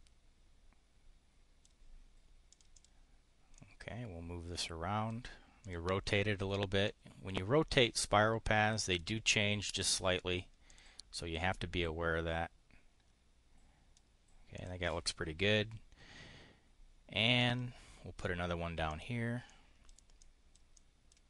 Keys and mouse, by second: 2.5 click, 3.5-5.1 drag, 5.6 click, 6.8-9.0 drag, 10.6 click, 11.5-14.0 drag, 14.5 click, 17.4 click, 18.8 click, 19.4 click, 20.1 click, 20.7 click.